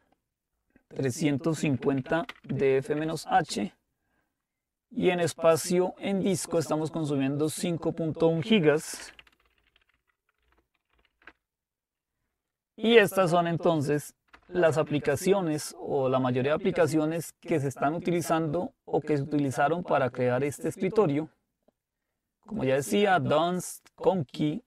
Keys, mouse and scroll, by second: 1.6-3.3 typing, 8.9-11.6 typing, 12.7-15.0 typing, 18.0-20.8 drag, 22.6-23.6 drag.